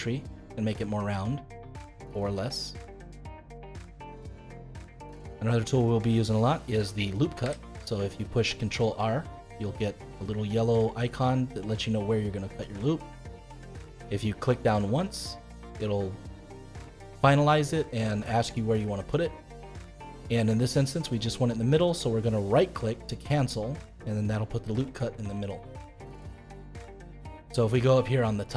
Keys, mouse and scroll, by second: 4.6-7.3 middle drag, 7.3 ctrl+r, 23.2-28.5 middle drag.